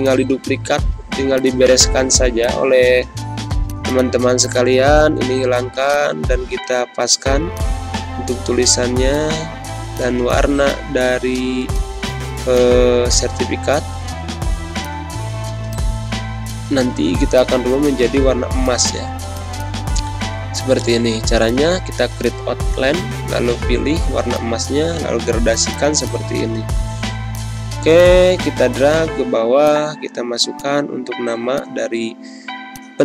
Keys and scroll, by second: 0.5 BackSpace, 4.9 BackSpace, 5.1 Delete, 17.1 z, 17.6 space, 23.9 g, 25.8 space, 30.1 ctrl+c, 31.3 t, 31.6 ctrl+a, 32.0 ctrl+v.